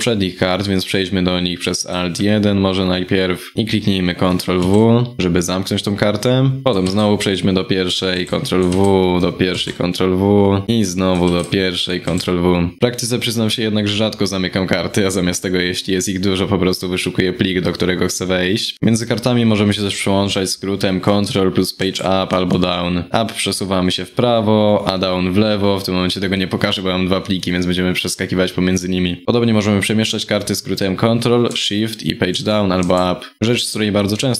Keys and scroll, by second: 4.2 ctrl+w, 7.8 ctrl+w, 9.2 ctrl+w, 11.7 ctrl+w, 31.9 ctrl+shift+Page_Down, 32.4 ctrl+shift+Page_Up.